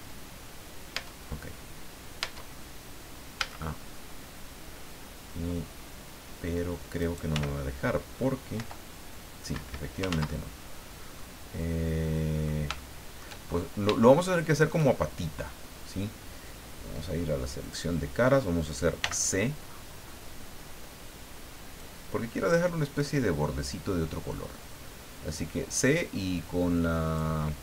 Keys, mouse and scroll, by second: 0.9 Tab, 2.2 Tab, 3.3 a, 7.0 right click, 7.3 l, 8.5 i, 9.5 Escape, 10.1 ctrl+z, 10.7-11.0 scroll down 2, 11.1-12.6 middle drag, 12.7 shift+middle click, 13.4-13.8 shift+scroll up 2, 14.1 shift+middle click, 17.6 click, 19.0 c, 19.7-20.0 scroll up 2, 20.3 scroll down 2, 21.8-27.3 drag.